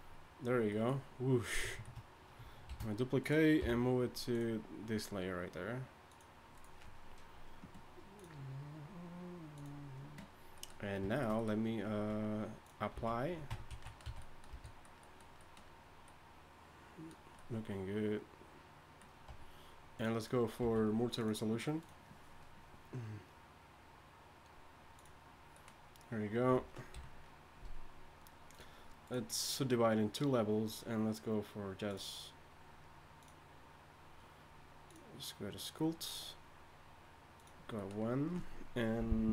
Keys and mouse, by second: 2.7 shift+d, 3.6 m, 12.0 z, 13.5 Tab, 13.5 z, 13.8 z, 14.0 a, 14.7 a, 19.3 Tab, 20.6 a, 26.9 KP_1.